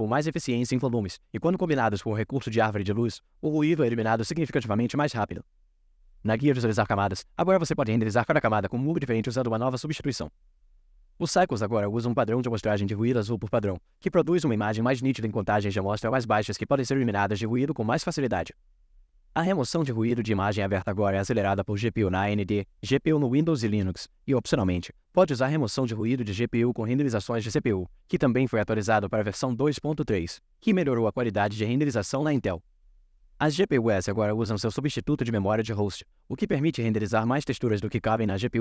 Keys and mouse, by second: 0.0-1.0 drag, 2.9 click, 4.5 click, 6.9 click, 8.9-9.9 drag.